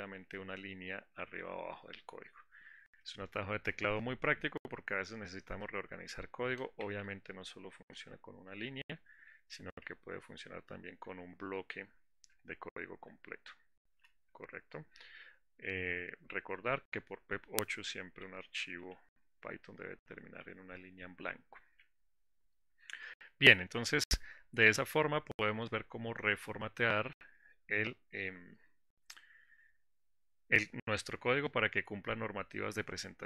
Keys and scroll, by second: 0.5 alt+shift+Down, 1.6 alt+shift+Up, 9.2 alt+shift+Up, 10.0 alt+shift+Down, 11.9 alt+shift+Up, 12.5 alt+shift+Down.